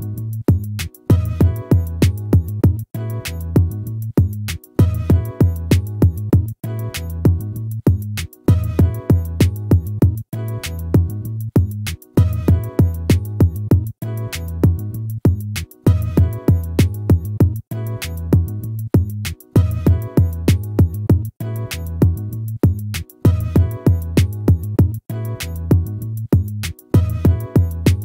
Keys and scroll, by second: 2.4 ctrl+-, 5.0 ctrl++, 6.8 ctrl++.